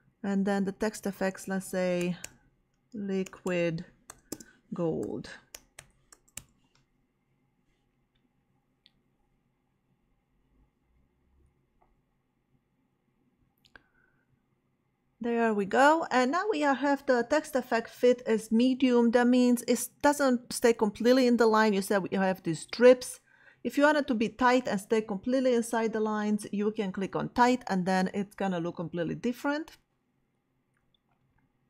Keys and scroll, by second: 1.8-6.6 typing.